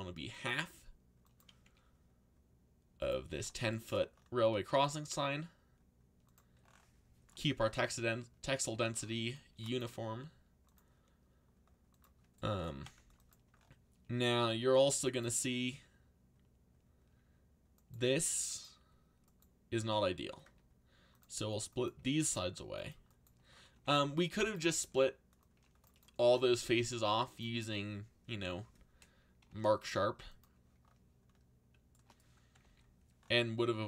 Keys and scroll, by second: 0.5 g, 1.6 s, 4.5 g, 8.7 c, 12.5-13.4 typing, 20.0-20.9 typing, 23.5-24.7 typing, 29.5 u, 32.6 ctrl+z.